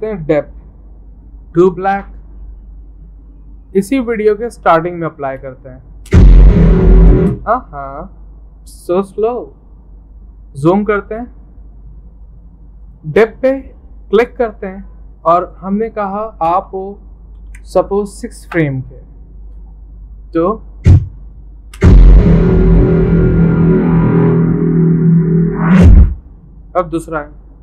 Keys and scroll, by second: 0.0-1.0 typing, 16.7 Left, 16.9 Left, 17.1 Left, 17.6 0, 18.6 Return.